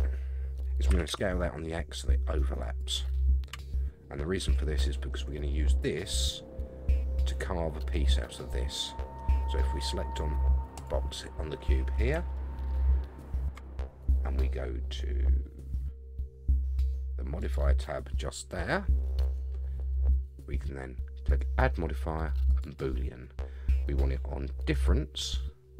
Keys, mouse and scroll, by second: 0.9 s, 3.5 Tab, 4.5-4.9 middle drag, 5.0-5.9 scroll up 4, 10.8 click, 12.3-13.6 shift+middle drag, 17.4 click, 21.3-22.6 drag, 24.7 click.